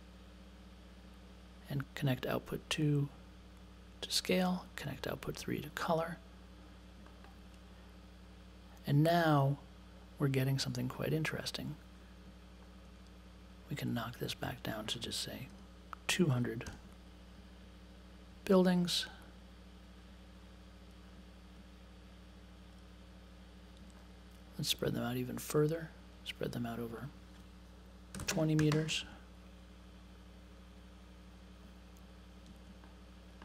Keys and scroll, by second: 1.8 space, 15.5 1, 16.6 BackSpace, 16.7 2, 27.9-29.4 typing.